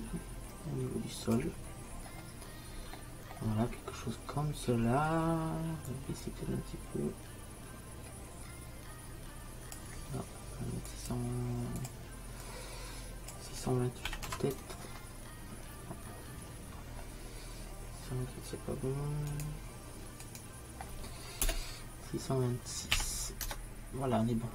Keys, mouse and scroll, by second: 2.0-3.0 middle drag, 5.0 middle click, 6.0-7.9 drag, 11.0-13.0 drag, 19.4-21.2 drag.